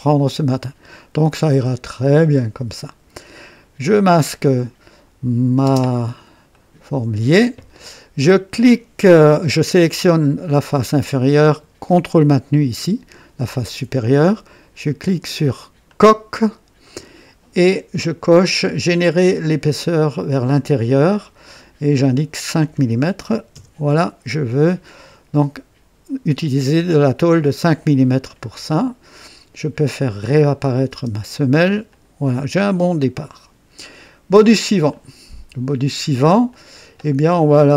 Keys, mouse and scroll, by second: 3.9 click, 5.6 space, 6.5 right click, 10.0 click, 10.6-11.6 drag, 13.5 ctrl+click, 15.9 click, 16.9 right click, 19.4 click, 22.0 click, 23.3 KP_5, 23.5 KP_Enter, 24.9-27.0 drag, 27.1 right click, 27.7 click, 30.3 click, 30.9 typing, 31.9 click, 32.7 click, 34.9 click, 36.5 click.